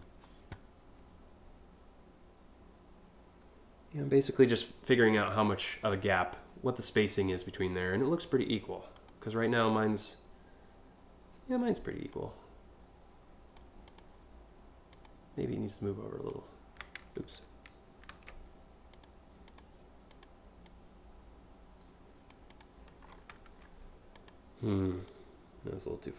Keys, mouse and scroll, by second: 8.6 click, 11.7-13.2 drag, 13.4 click, 14.5 click, 15.0 click, 17.7 ctrl+z, 18.5 click, 19.0 click, 19.7 click, 20.3-21.9 drag, 22.1 click, 22.7 scroll down 3, 23.2 scroll up 1, 23.7 click, 24.7-26.1 drag.